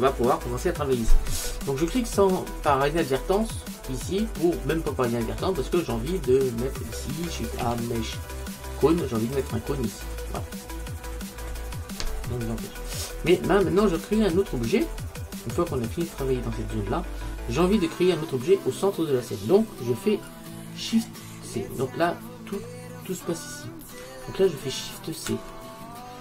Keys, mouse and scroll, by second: 1.6 click, 2.5-4.8 middle drag, 7.7 shift+a, 10.6 middle click, 14.5-18.0 middle drag, 21.8-22.8 scroll up 1, 22.8-25.4 middle drag, 25.4 shift+c.